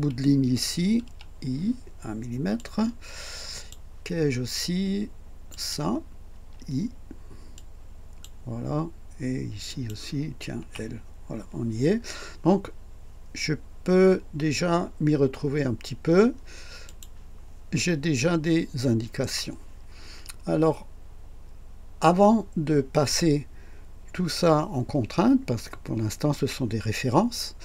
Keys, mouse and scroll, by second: 1.0 typing, 2.6-3.9 drag, 5.5 click, 6.3 typing, 7.5-8.4 drag, 9.7 click, 10.6 typing, 16.9 click.